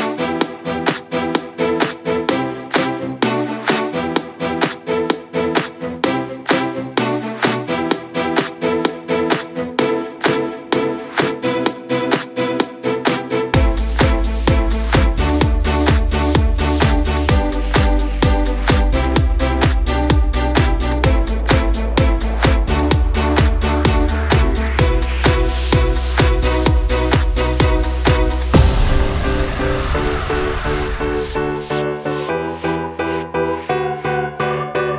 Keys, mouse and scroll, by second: 3.5 a, 5.7-10.0 drag, 10.3 scroll up 1, 10.4 middle click, 11.0 ctrl+s, 11.8-13.3 middle drag, 13.3 click, 14.4 middle click, 15.1 click, 15.7 shift+click, 16.2 middle click, 16.9 shift+click, 17.6 x, 19.2-20.7 middle drag, 20.7 click, 21.7 middle click, 22.2 click, 22.7 middle click, 23.3 k, 26.0 click, 26.4-27.4 middle drag, 27.4 click, 28.3 x, 30.0 middle click, 30.9 click, 32.0 shift+click, 32.4 shift+click, 32.8 shift+click, 33.2 middle click, 33.9 shift+click, 34.3 shift+click, 34.6 shift+click.